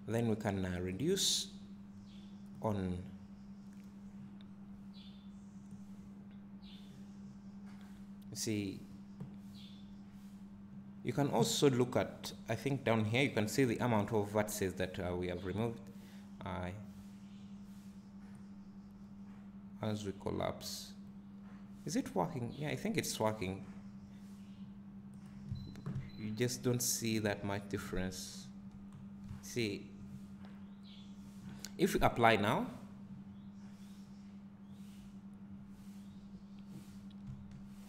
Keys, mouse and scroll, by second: 26.1 `, 27.5 scroll up 1, 27.7 `, 28.9 scroll down 1, 36.2 drag, 37.4 Tab.